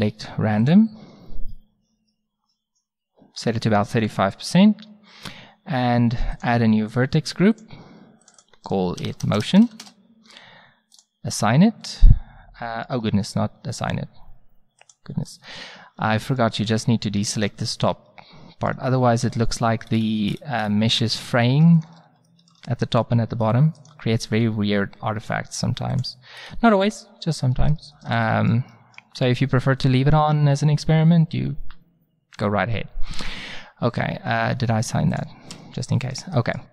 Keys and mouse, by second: 1.4 click, 6.4-10.4 drag, 11.0-12.7 drag, 12.7-14.2 middle drag, 14.8 click, 15.5-16.6 middle drag, 16.6 click, 16.6 c, 19.2 c, 22.9 c, 25.8 middle click, 26.0 click, 26.4-27.5 middle drag, 27.9 middle click, 28.4 middle click, 33.1 Tab, 34.4 Tab, 35.1 click, 35.5 Tab, 35.9-36.7 middle drag.